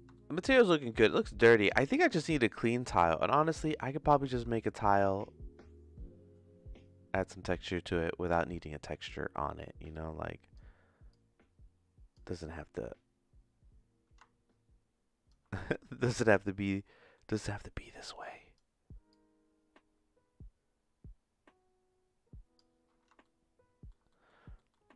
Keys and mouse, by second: 0.1 middle click, 0.6 shift+middle click, 2.6 middle click, 4.5-8.1 shift+middle drag, 9.9 click, 11.1-12.1 drag, 12.5-15.3 drag, 16.8 middle click, 17.0 middle click, 17.9 click, 19.1-22.5 drag, 23.2 shift+middle click, 24.1 middle click, 24.6 middle click.